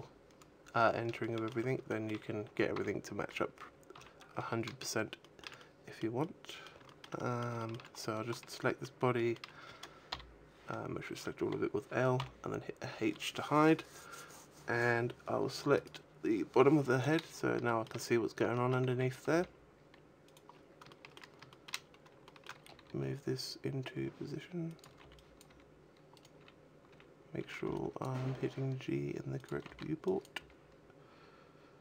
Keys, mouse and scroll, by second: 0.1-0.7 scroll down 8, 1.1 shift+middle click, 1.8 shift+middle click, 2.6 a, 3.5 scroll down 4, 3.8 a, 4.2-5.0 scroll up 4, 5.0 scroll up 1, 5.1 shift+middle click, 5.4 middle click, 6.1 middle click, 6.7 shift+middle click, 7.0 middle click, 7.4 shift+middle click, 7.8 right click, 8.5 shift+middle click, 9.0 shift+middle click, 10.5 l, 12.0 h, 15.6 right click, 16.9-17.2 scroll down 4, 17.4 shift+middle click, 17.8-18.3 scroll down 1, 18.3 shift+middle click, 18.7 a, 19.0 g, 20.1 click, 20.3-20.8 scroll up 4, 20.7 shift+middle click, 21.4 shift+middle click, 21.7 scroll up 1, 22.1 shift+middle click, 22.6 g, 24.7 click, 24.7-28.0 typing, 26.1 right click, 29.2 click, 29.3 a, 29.5 b, 30.2 g.